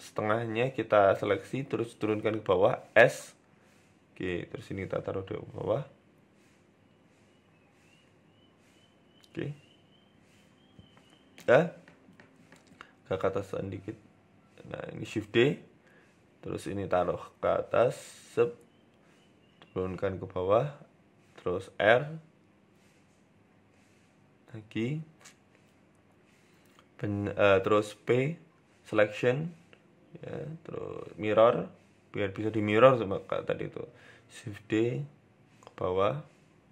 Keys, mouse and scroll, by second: 0.6 click, 1.8 g, 4.1 click, 5.0 g, 6.9 shift+middle click, 7.4 click, 7.9 g, 9.0-10.0 scroll down 3, 9.4-10.0 scroll up 1, 10.7-11.1 scroll down 1, 11.5 click, 13.0 shift+d, 14.1 g, 15.2 shift+middle click, 15.7 click, 16.3 g, 18.8 shift+middle click, 19.2 click, 19.5 shift+middle click, 20.1 g, 20.9-21.2 scroll up 4, 21.1 shift+middle click, 21.6 r, 22.5 f, 29.1 Tab, 29.3 right click, 29.9 click, 31.7 shift+middle click, 33.0 Tab, 33.6 s, 33.9 a, 34.1 s, 35.2 shift+d.